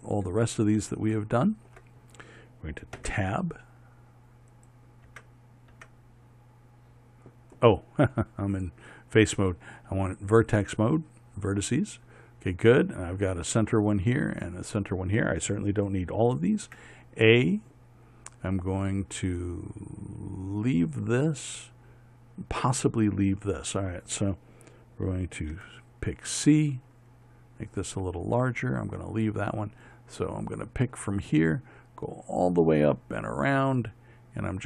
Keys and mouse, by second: 3.6 Tab, 5.7 Tab, 6.3 Tab, 9.2 click, 17.3 a, 26.1 c.